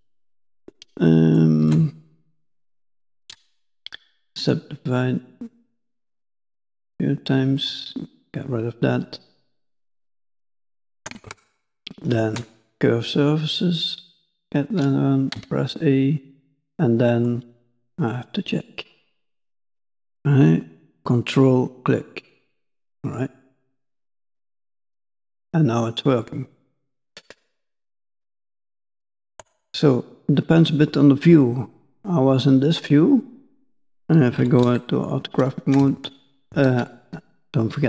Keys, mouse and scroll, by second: 1.1 middle click, 1.7 Tab, 2.3 shift+middle click, 3.1 right click, 6.0 click, 6.2-6.8 click, 6.4 click, 6.6 click, 7.6 click, 9.5 click, 10.7-11.1 ctrl+click, 11.3 shift+middle click, 12.7 click, 16.8 middle click, 29.6 middle click, 34.4 KP_5, 34.6 KP_1.